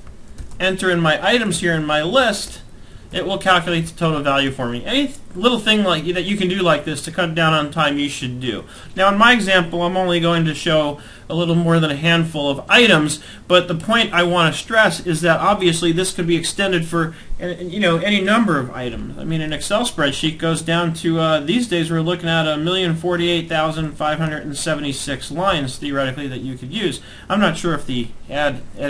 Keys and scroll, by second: 0.7 shift+Down, 2.4 Return, 2.9 Up, 3.1 Down, 3.8 ctrl+Left, 4.0 Right, 4.4 Left, 19.1 ctrl+Down, 20.1 Up, 23.2 ctrl+Up, 23.7 Down, 24.3 ctrl+Down, 25.1 ctrl+Up, 25.5 Down.